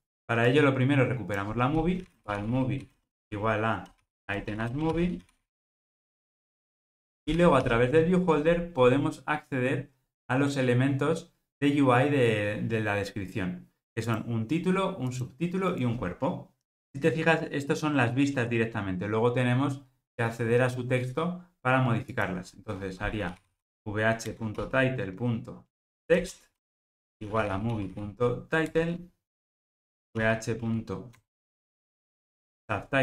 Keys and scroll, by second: 24.3 Return.